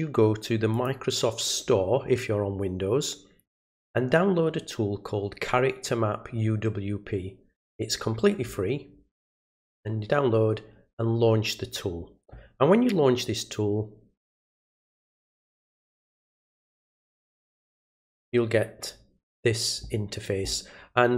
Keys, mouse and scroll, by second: 0.7 click, 17.0 click.